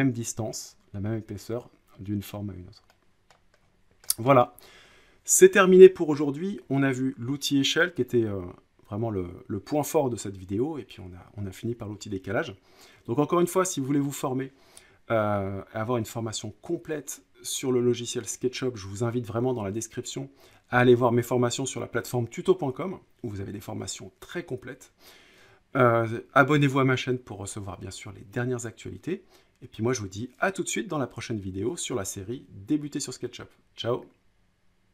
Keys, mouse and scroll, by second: 3.2 scroll up 1, 3.3 scroll, 3.8-4.1 scroll down 7, 4.3 middle click, 4.4 scroll, 4.6 scroll up 2.